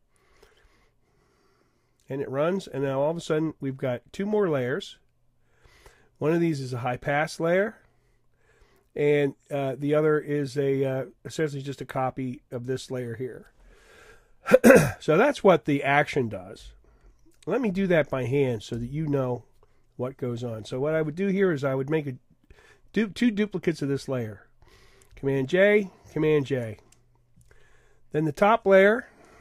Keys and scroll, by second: 25.1 super+j.